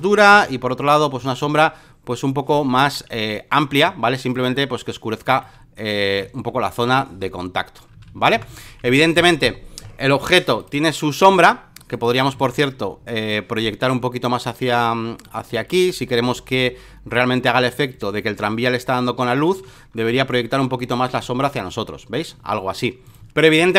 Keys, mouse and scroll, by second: 0.4 ctrl+t, 1.4-2.5 shift+drag, 3.3 alt+click, 4.3 alt+click, 5.4-6.8 shift+drag, 6.8 Down, 7.8 Up, 8.3 Return, 8.9 alt+middle click, 8.9 scroll, 9.4 alt+middle click, 9.4-9.9 scroll, 9.8 alt+middle click, 10.6 ctrl+click, 11.9 click, 12.4 ctrl+t, 13.3-14.7 ctrl+drag, 15.2 ctrl+click, 16.3 ctrl+click, 17.7 ctrl+click, 18.4-19.5 ctrl+drag, 20.1 Return, 21.2 click, 21.2 space, 23.0 click, 23.7 ctrl+click.